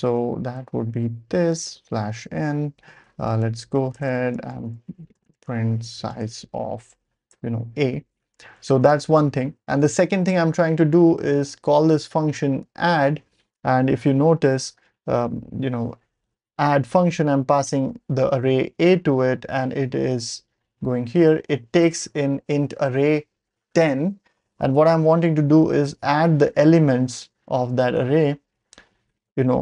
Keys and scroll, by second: 0.0-1.9 typing, 3.0-8.4 typing, 8.9 Return, 9.6 Down, 10.8 Right, 11.4-11.7 Right, 11.8-12.2 Right, 12.3-12.6 Right, 12.6-13.4 typing, 14.0 ctrl+alt+super+p, 24.2 ctrl+alt+super+p, 25.6 ctrl+alt+super+p.